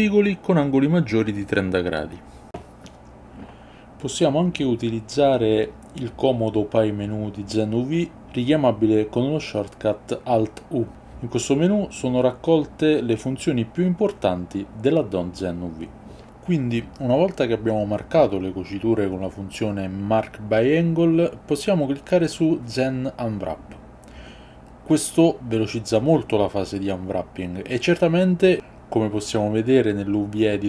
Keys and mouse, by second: 0.5-1.8 middle drag, 2.3-5.6 middle drag, 6.2 alt+u, 29.4-30.6 drag.